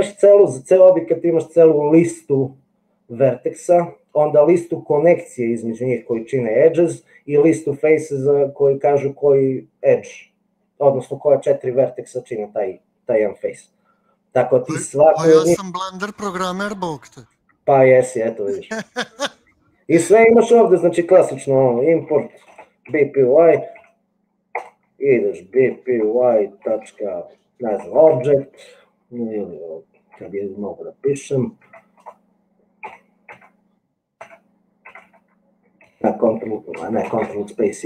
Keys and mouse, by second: 21.9-23.9 typing, 24.9 Return, 25.8-27.8 typing, 28.0 Tab, 29.1 BackSpace, 30.5 b, 32.2 BackSpace, 33.0 b, 33.4 Tab, 34.2 Tab, 35.0 Tab.